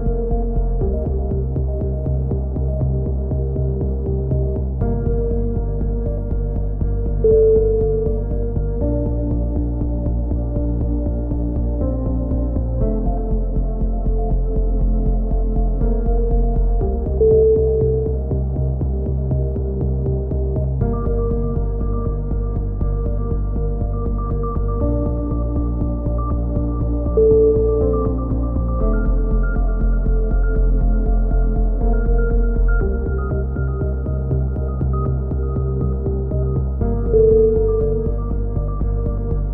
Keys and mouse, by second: 0.0 KP_3, 0.3 click, 0.9 a, 1.0 z, 1.1 click, 4.2-5.2 right drag, 4.6 e, 4.7 click, 5.2 s, 5.9-7.8 drag, 6.6 a, 8.3 click, 8.3 right click, 8.6 KP_3, 8.6 click, 8.6 z, 9.6 a, 9.7 click, 10.7 click, 10.7 z, 12.0 KP_3, 12.1 z, 12.3 click, 13.4 a, 13.6 z, 13.7 click, 14.6-15.6 right drag, 15.1 KP_4, 15.6 KP_3, 15.7 middle click, 15.8 z, 16.1-17.6 drag, 16.1 right click, 17.7 a, 17.8 click, 17.8 z, 19.0-20.8 right drag, 19.0 f, 19.1 middle click, 20.4 middle click, 20.8 click, 21.7 right click, 22.6 f, 22.6 a, 22.9 click, 23.7-25.0 right drag, 24.4 f, 24.5 a, 25.0 click, 25.5 KP_3, 25.7 click, 26.3 middle click, 27.2 click, 29.1 click, 29.5 KP_3, 29.6 z, 32.0 click, 32.0 right click, 32.5 click, 34.0 a, 35.3 click, 35.3-37.1 right drag, 37.1 KP_3, 38.0 click, 38.2 right click, 38.6 KP_3, 39.2 shift+d.